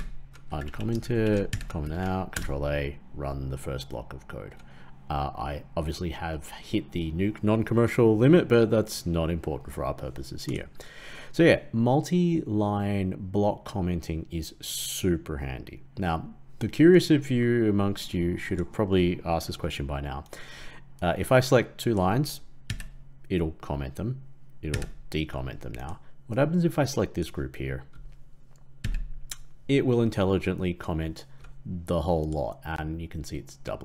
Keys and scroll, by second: 1.4 ctrl+/, 1.9 ctrl+a, 2.3 ctrl+Return, 22.6 ctrl+/, 24.6 ctrl+/, 28.7 ctrl+/.